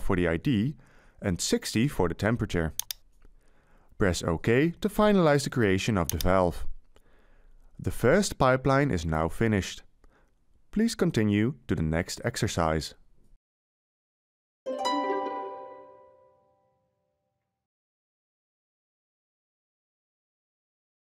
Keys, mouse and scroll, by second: 3.5 6, 4.9 0.